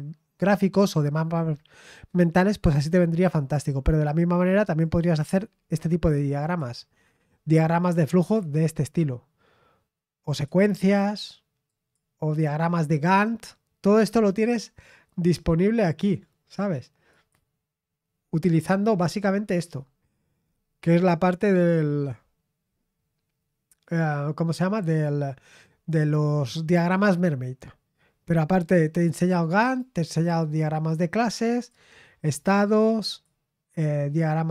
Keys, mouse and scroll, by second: 4.8 click, 5.6-6.0 scroll down 2, 6.4 click, 10.3 click, 11.7 click, 17.1 click, 18.9-19.7 scroll down 1, 19.7-20.5 scroll down 1, 20.5-20.9 scroll down 1, 26.7 click, 29.0 click, 29.8 click, 30.4 click, 31.5 click, 33.0 click.